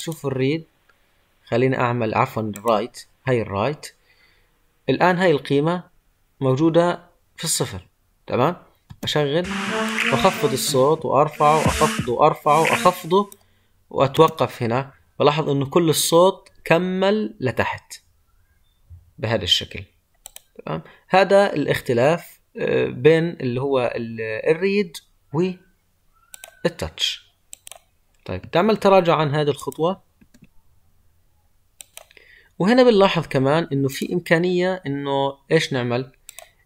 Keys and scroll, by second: 28.6 ctrl+z.